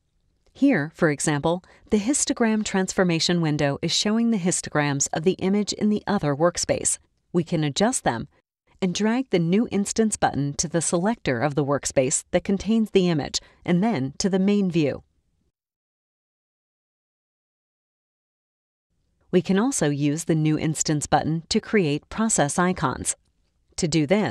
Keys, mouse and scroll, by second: 3.9-5.1 drag, 6.4-7.7 drag, 8.7-14.8 drag, 23.7-24.3 drag.